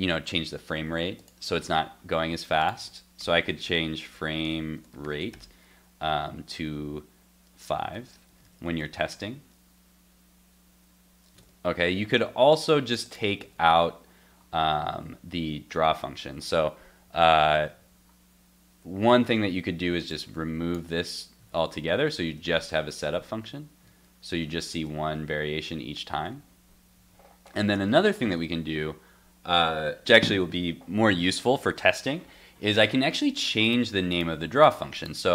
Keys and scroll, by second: 8.4 super+s, 8.7 super+Tab, 9.1 super+r, 11.4 super+Tab, 13.4 super+x, 13.7 super+s, 20.9 super+x, 21.4 super+s, 21.9 super+Tab, 23.9 super+r, 24.7 super+r, 26.2 super+Tab, 27.7 super+z, 28.2 super+s.